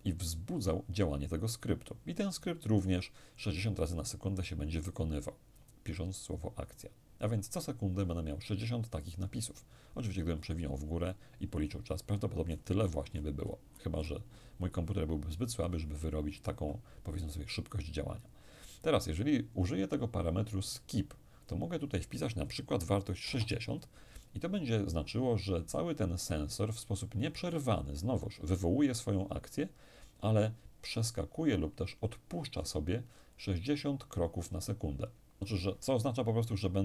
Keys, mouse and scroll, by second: 10.1-10.8 scroll up 2, 10.8-11.6 scroll up 1, 11.6-12.2 scroll up 1, 12.2-12.7 scroll up 1, 12.7-13.8 scroll down 1, 13.8-14.6 scroll down 1, 14.6-15.3 scroll down 1, 21.4 click, 23.2 6, 23.6 0, 24.2 click.